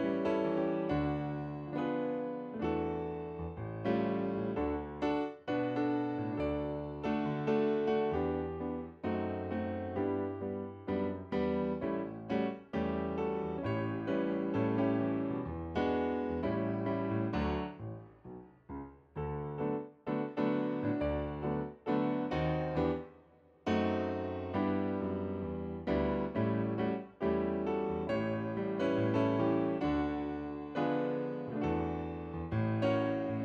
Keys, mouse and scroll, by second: 9.3 scroll up 1, 9.3 scroll down 1, 9.4 scroll up 1, 9.9 alt+click, 33.3-33.4 alt+drag.